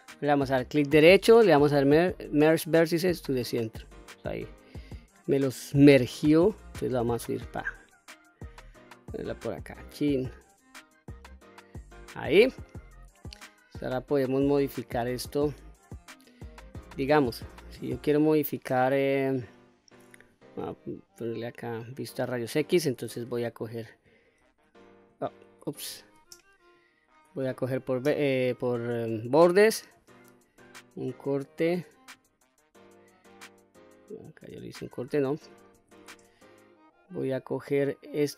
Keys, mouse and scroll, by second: 0.5-2.8 right drag, 3.8 middle click, 5.5-9.3 drag, 9.7-11.5 middle drag, 11.5-12.2 scroll down 2, 12.2 middle click, 13.4 click, 14.8-15.6 middle drag, 16.1-16.7 scroll down 1, 18.1-18.9 shift+middle drag, 19.8 q, 20.4-20.9 scroll up 2, 20.9-22.0 middle drag, 24.0 shift+r, 25.5 ctrl+z, 26.3 click, 27.2 2, 27.7 click, 30.1 ctrl+r, 32.6 click, 33.4-34.4 middle drag, 34.9 ctrl+z, 35.3 ctrl+z, 36.0 middle click, 37.1 scroll down 1.